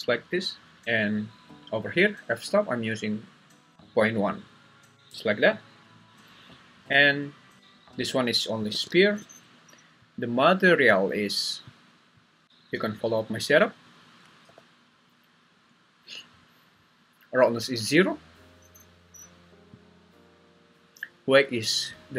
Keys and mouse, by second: 5.1 Escape, 8.7 g, 9.3 Escape, 12.4 click, 14.4 n.